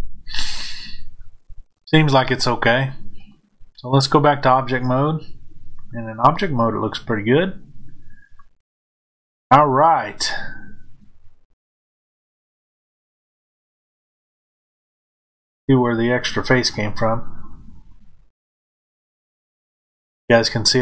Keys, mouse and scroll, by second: 3.1-6.3 drag, 6.3-20.8 middle drag.